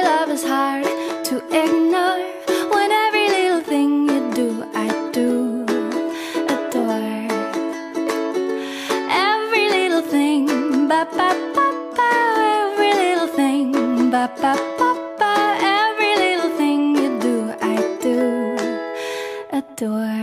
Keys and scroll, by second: 1.4 ctrl+z, 1.9 ctrl+z, 7.5 ctrl+z, 10.8 ctrl+z, 12.7 ctrl+z, 13.6 ctrl+z, 15.7 ctrl+t, 19.2 ctrl+z, 19.8 ctrl+z.